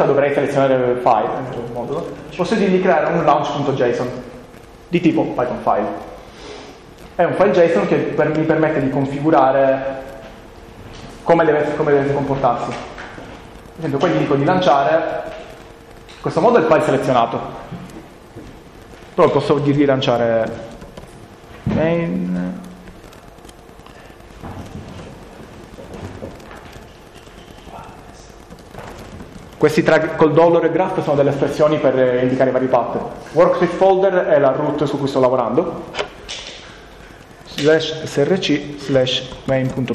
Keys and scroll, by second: 5.1 Return, 13.1 Down, 13.3 Down, 13.7 Down, 17.8 Up, 17.9 Up, 18.2 Up, 19.0 Return, 20.5-21.2 typing, 21.5 Down, 21.9 Down, 23.7 shift+Right, 25.7 o, 25.8 BackSpace, 28.2-29.9 typing, 39.1-39.9 typing.